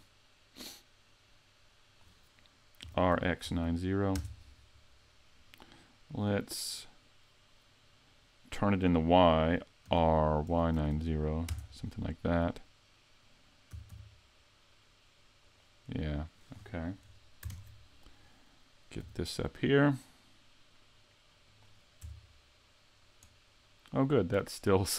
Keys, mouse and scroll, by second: 2.8 r, 5.6 middle click, 7.8 middle click, 9.9 r, 13.7 s, 15.5 click, 17.5 ctrl+KP_3, 19.0 g, 21.6 click, 22.0 Tab, 24.2 click.